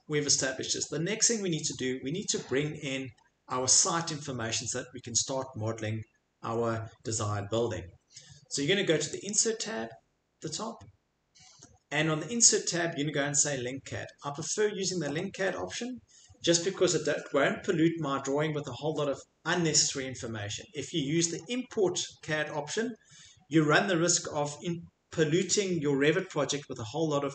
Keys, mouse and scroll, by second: 0.8 middle click, 9.3 click.